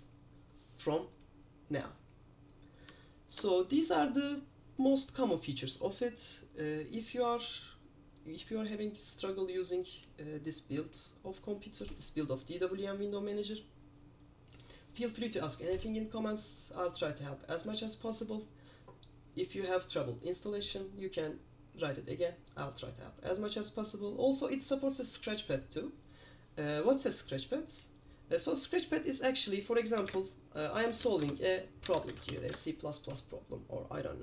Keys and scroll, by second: 3.5 super+q, 30.2 super+Return, 30.8-32.9 typing.